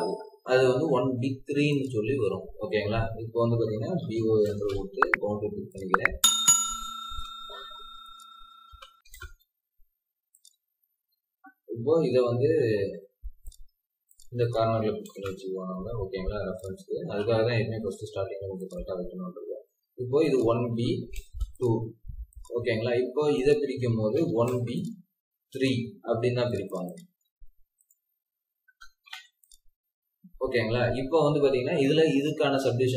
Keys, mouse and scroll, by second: 3.9-4.3 typing, 8.6-9.0 typing, 10.6-11.2 scroll down 1, 11.2 scroll up 1, 12.8 typing, 13.6 Escape, 14.4 double click, 14.9 typing, 17.1 scroll up 1, 18.0 m, 18.9 Escape, 19.0 scroll down 3, 21.1 m, 24.4 typing, 25.7 Escape, 26.7 double click, 28.6 BackSpace, 29.1 3, 29.9 scroll down 1, 30.9 scroll up 1.